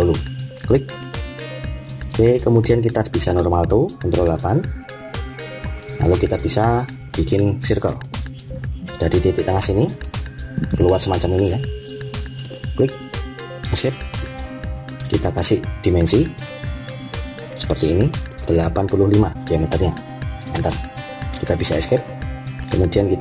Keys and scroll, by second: 4.0 8, 13.5 Escape, 20.4 Return, 21.8 Escape.